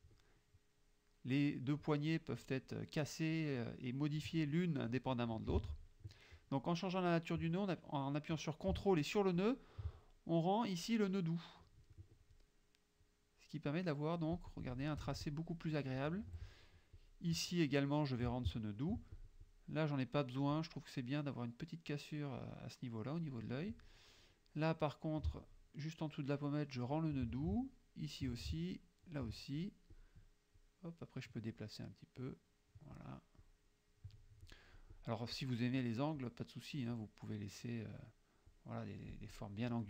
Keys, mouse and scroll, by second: 1.2 click, 3.4-4.4 drag, 5.7 ctrl+z, 9.5 ctrl+click, 13.1-14.9 drag, 15.1 F1, 15.3 click, 16.3 F2, 17.0 click, 18.4 ctrl+click, 19.2 ctrl+click, 20.6 click, 26.8 ctrl+click, 28.1 ctrl+click, 29.2 ctrl+click, 30.0 click, 30.7 click, 32.2 click, 33.5 click, 34.5 click, 35.4 click, 36.2-38.2 drag, 38.6-39.6 drag.